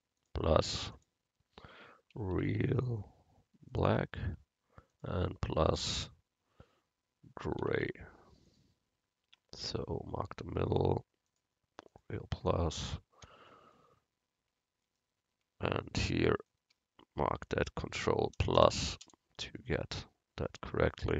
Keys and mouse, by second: 0.2-2.9 drag, 4.9-7.6 drag, 9.3 Tab, 9.7 Tab, 11.4-13.7 drag, 11.4 right click, 13.5 right click, 21.0-21.1 drag.